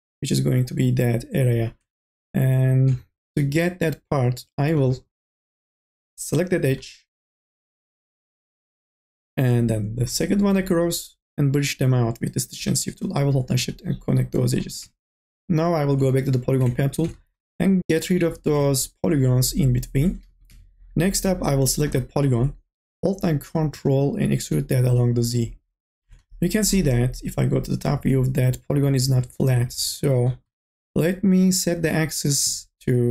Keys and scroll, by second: 5.5 2, 20.0-21.0 typing.